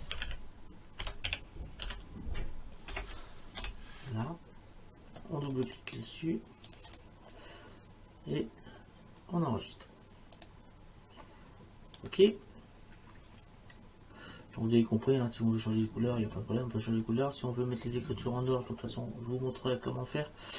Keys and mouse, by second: 0.0-1.9 typing, 3.0 BackSpace, 3.6 l, 5.5 click, 10.4 click, 12.0 click.